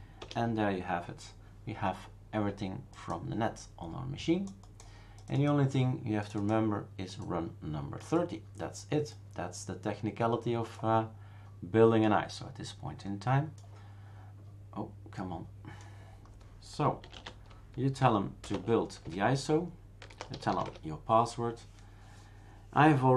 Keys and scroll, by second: 0.2 Return, 17.0-18.4 typing, 18.5 Tab, 19.0 Return, 19.8-21.0 typing.